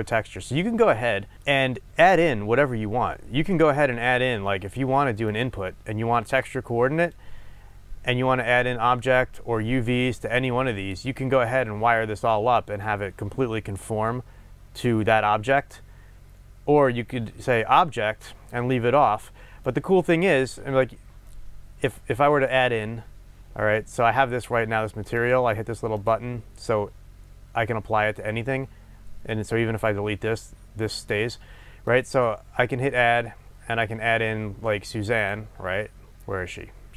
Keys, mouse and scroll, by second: 1.0-1.3 scroll up 2, 1.9 shift+a, 7.1 click, 7.4-8.5 scroll up 2, 8.5-9.3 scroll up 1, 9.3-25.4 drag, 26.0 click, 31.9-36.9 drag.